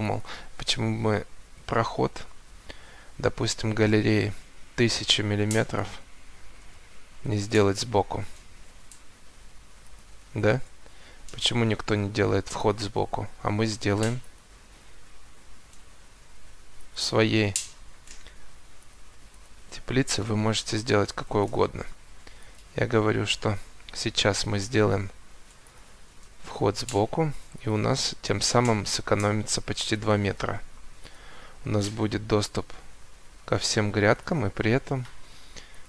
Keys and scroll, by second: 5.5 1, 5.7 0, 7.2 Return, 8.3 Escape, 11.6 Escape, 17.0 Escape, 23.3 Escape, 28.3 Escape, 34.5 Escape.